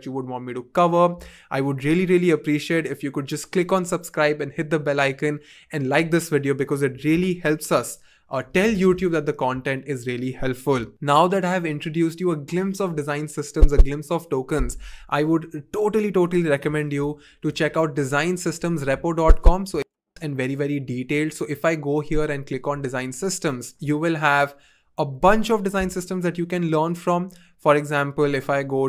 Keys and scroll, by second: 8.8 typing, 20.1 Return.